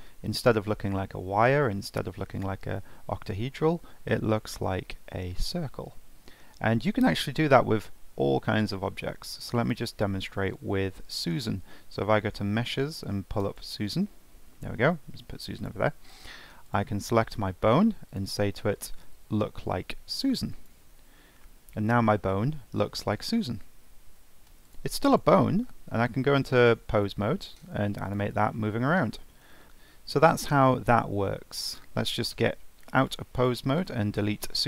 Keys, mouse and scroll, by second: 9.0 shift+a, 14.8 g, 16.0-16.6 scroll down 2, 16.6 click, 18.1-21.1 drag, 21.4-24.5 middle drag, 25.1 click, 25.9 ctrl+Tab, 26.4 click, 27.1 g, 28.5 scroll down 1, 28.6-31.7 middle drag, 31.7 click, 33.0-33.8 drag.